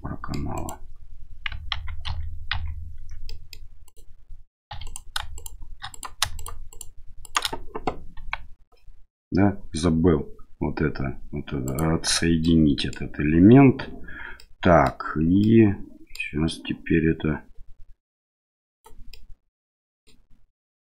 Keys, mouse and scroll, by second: 0.5 right click, 1.7 ctrl+z, 2.1 ctrl+z, 2.5 ctrl+z, 3.3 middle click, 3.8 right click, 4.7 3, 4.8 right click, 5.3 shift+right click, 5.9 right click, 6.4 shift+right click, 6.7 shift+right click, 7.2 shift+right click, 8.2 g, 12.4 middle click, 14.4 middle click, 15.4 middle click, 18.7 right click, 18.7 2, 19.1 middle click.